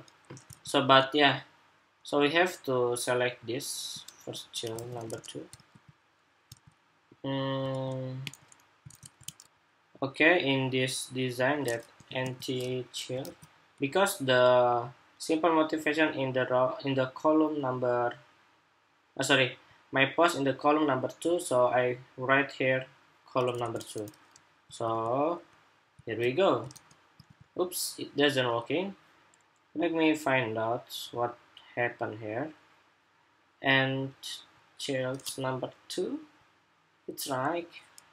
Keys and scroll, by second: 4.5 super+s, 5.3 super+r, 6.2 super+Tab, 7.4 super+Tab, 8.1 super+Tab, 9.0 super+Tab, 9.2 shift+super+2, 13.0 super+s, 23.4 super+Tab, 24.5 super+r, 25.8 super+r, 26.5 super+r, 26.9 super+r.